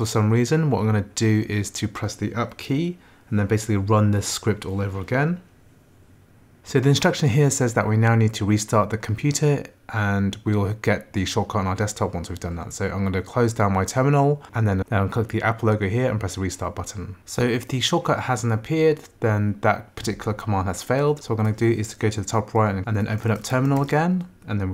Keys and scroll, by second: 2.7 Up, 5.3 Return, 22.8 BackSpace, 23.9 Return.